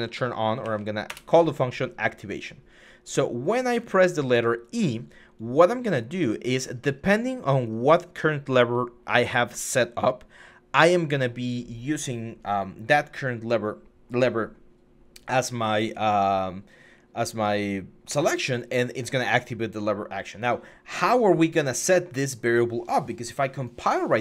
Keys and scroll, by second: 0.0-0.4 typing, 0.9 Return.